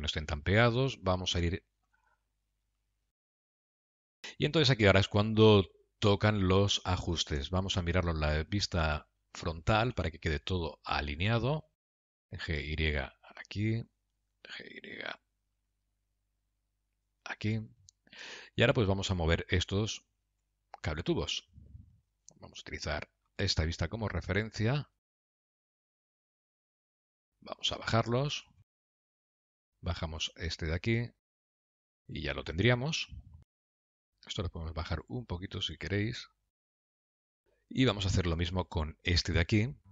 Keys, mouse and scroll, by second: 0.8 shift+middle click, 1.3 middle click, 1.9 g, 3.5 middle click, 4.7-5.8 scroll down 5, 5.3 middle click, 8.1 KP_3, 9.3 KP_3, 10.7 KP_Decimal, 11.5 scroll up 1, 11.6-11.9 scroll down 7, 12.2 click, 12.4 g, 14.7 click, 15.0 g, 19.0 click, 20.7 Tab, 22.5 middle click, 24.3 click, 25.1 shift+click, 26.2 g, 28.2 middle click, 29.0 g, 30.6 click, 31.1 g, 32.2 middle click, 33.8 click, 35.3 shift+click, 35.9-36.4 scroll down 4, 36.6 g, 37.5 middle click, 38.6 Tab, 39.0 click.